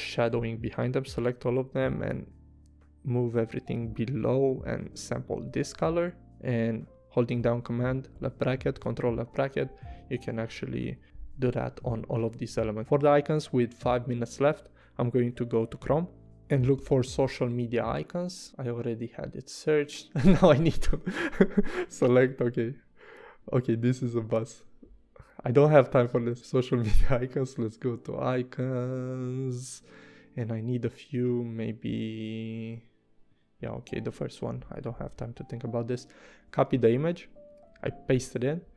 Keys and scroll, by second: 4.5 i, 5.6 v, 7.4 super+[, 8.1 super+[, 10.3 Up, 16.2-17.7 typing, 36.5 super+Tab, 37.7 super+v.